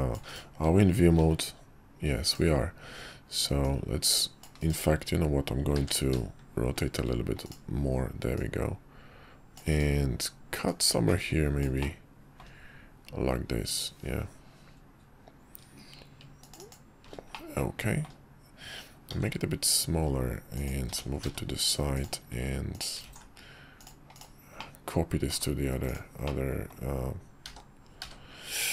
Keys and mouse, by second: 1.1 shift+v, 2.3-2.8 drag, 3.6-4.7 drag, 5.8 ctrl+q, 8.3-8.8 middle drag, 8.8-9.9 drag, 10.6-16.7 drag, 11.9-16.7 middle drag, 17.3-18.0 middle drag, 19.1 s, 20.9 g, 23.0 alt+x, 23.8 click, 24.1 click, 24.6-25.3 middle drag, 25.8 click, 26.2-26.7 middle drag, 27.4 s.